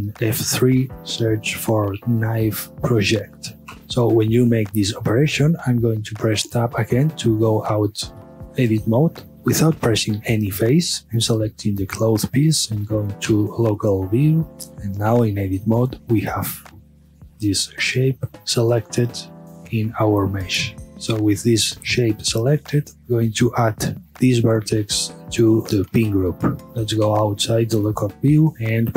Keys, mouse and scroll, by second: 0.1 F3, 2.8 Down, 3.8-6.3 middle drag, 8.7-10.9 middle drag, 10.9 Tab, 11.4 click, 13.3 KP_Divide, 15.1 Tab, 15.8 scroll up 1, 16.2-18.4 middle drag, 18.7-20.0 middle drag, 20.0-21.4 scroll down 1, 22.4 click, 24.1 1, 26.0 click, 26.6 Tab, 27.1 KP_Divide, 28.5 middle click.